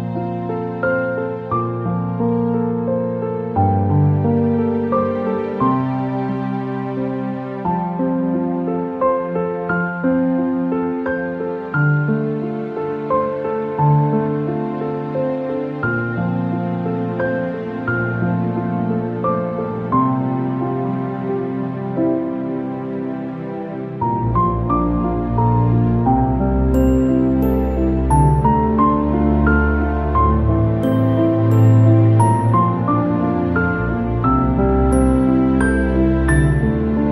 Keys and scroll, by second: 7.5 ctrl+shift+], 14.7 Return.